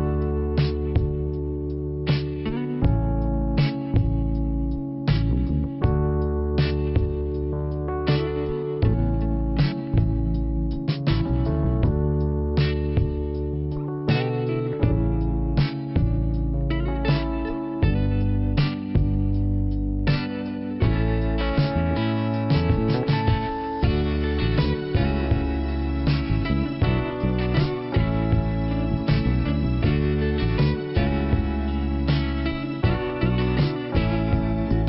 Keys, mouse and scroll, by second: 0.2 click, 0.7 click, 2.6 click, 2.7 click, 3.6 click, 9.1 click, 9.1 click, 10.0 click, 11.5 click, 11.9 click, 13.1 click, 13.6-14.1 scroll down 1, 17.3 right click, 18.0 click, 20.1 click, 20.2 click, 21.5 click, 21.6 click, 23.7 click, 23.8 click, 25.3 click, 25.4 click, 26.0 click, 26.1 click, 26.9 right click, 28.9 click, 30.4 right click, 30.9 click, 31.9 right click, 32.4 click, 33.9 click.